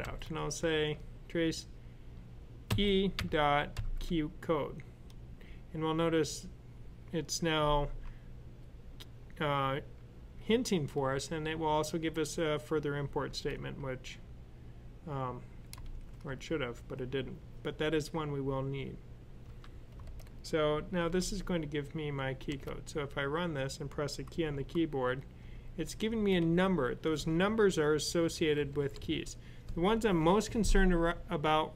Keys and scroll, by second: 2.3-3.6 typing, 15.7 ), 19.3 ;, 20.8 super+s, 24.3-26.3 typing, 27.3 Left, 28.2-28.8 typing.